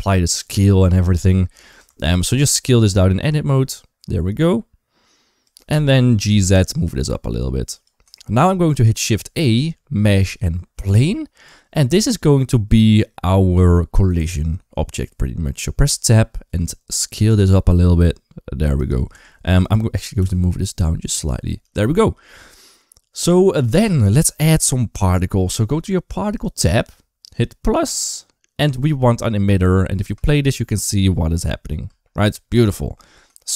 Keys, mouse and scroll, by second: 1.6 Tab, 1.9 a, 2.2 s, 5.5 Tab, 6.0 g, 8.0 shift+middle drag, 9.1 shift+a, 15.7 Tab, 16.9 s, 18.9 Tab, 20.0 g, 22.1 middle click, 23.0 middle click, 23.6 shift+middle click, 27.8 click, 29.8 space, 31.7 space, 33.2 shift+middle click.